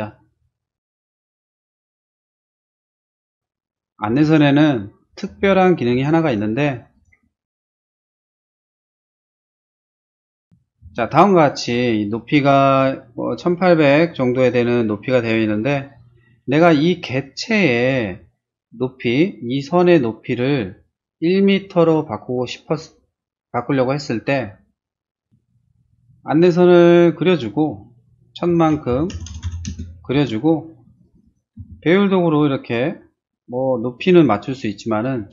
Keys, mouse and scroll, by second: 1.5 middle click, 1.9 middle click, 2.2 space, 2.8 click, 3.7 click, 4.1 r, 4.3 click, 5.1 click, 5.9 p, 6.2 click, 6.9 click, 7.4 middle click, 8.1 space, 8.2 click, 8.9 click, 9.4 click, 10.1 click, 10.4 click, 10.8 space, 25.3 t, 26.0 click, 28.6-30.1 typing, 30.8 click, 31.0 click, 31.2 click, 31.5 s, 32.2 click, 33.7 click.